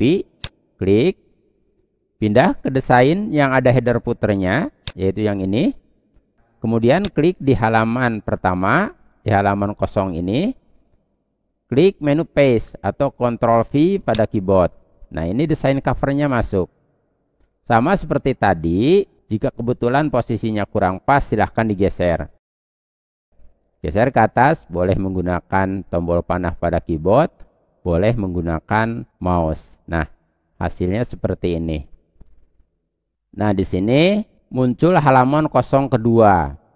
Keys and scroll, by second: 12.1 ctrl+v.